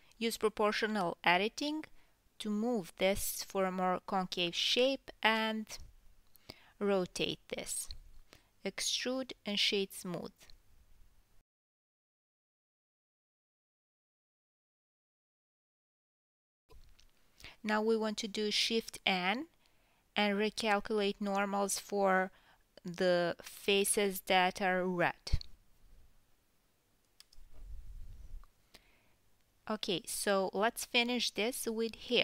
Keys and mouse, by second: 0.0 right click, 0.9 g, 1.5 g, 5.4 a, 5.6 KP_7, 5.9 r, 6.5 right click, 6.9 g, 8.4 g, 9.1-26.0 right drag, 9.1 KP_1, 9.9 Tab, 10.3 Tab, 10.9-13.8 drag, 11.8 shift+n, 12.2 Tab, 12.8 Tab, 13.6-15.2 middle drag, 13.6 g, 14.5 e, 15.2 middle click, 15.4 Tab, 16.2-23.6 ctrl+middle drag, 16.6-20.0 drag, 20.3 Tab, 20.6 a, 21.0 shift+n, 21.6 Tab, 21.8 drag, 22.0 Tab, 22.3 a, 22.6 shift+n, 22.8 Tab, 23.2 KP_1, 23.8 middle click, 25.4 KP_1, 26.1-27.6 right drag, 27.6-31.2 middle drag, 31.2 click, 31.4 Tab, 31.4-32.2 middle drag.